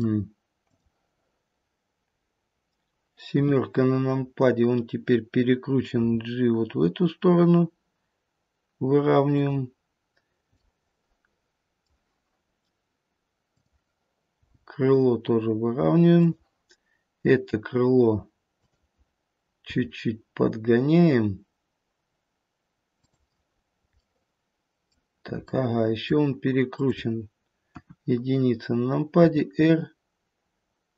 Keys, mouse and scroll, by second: 0.6 click, 3.4 KP_7, 4.1-5.4 scroll down 1, 6.0 g, 10.6 middle click, 10.7 middle click, 13.4 click, 14.4 g, 18.5 click, 19.7 g, 23.7 scroll up 1, 24.0 middle click, 25.5 middle click, 26.7 click, 27.6 KP_1, 29.2 r.